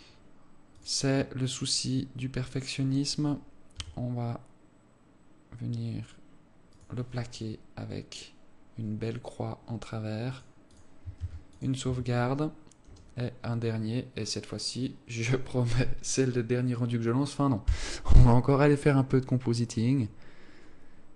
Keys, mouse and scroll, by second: 11.3 click, 11.7 ctrl+s, 12.4 Tab, 12.8 scroll down 1.